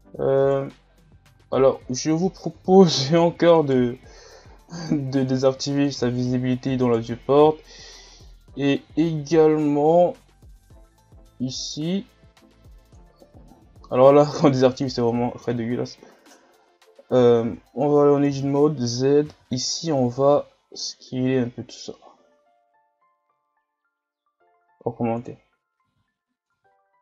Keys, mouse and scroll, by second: 0.9 scroll down 4, 1.4 shift+scroll up 3, 2.6 Tab, 3.2 z, 3.5 right click, 5.3-6.8 drag, 6.8 right click, 8.0 shift+scroll down 5, 8.5 scroll up 3, 12.9-17.5 drag, 17.5 Tab, 18.4 z, 19.2 s, 25.8 z, 26.1-26.5 scroll down 5, 26.5 Tab.